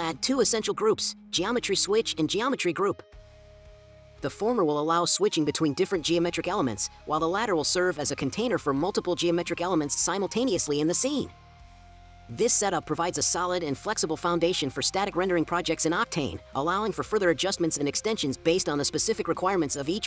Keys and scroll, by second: 0.0-1.7 typing, 11.5-12.2 scroll, 15.5-17.3 scroll.